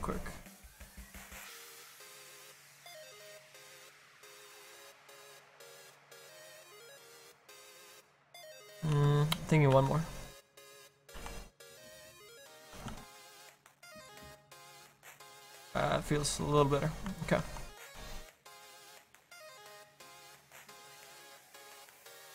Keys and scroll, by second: 9.0 ctrl+z, 9.7 ctrl+z, 10.6 ctrl+z, 11.3 ctrl+z, 12.8 ctrl+d.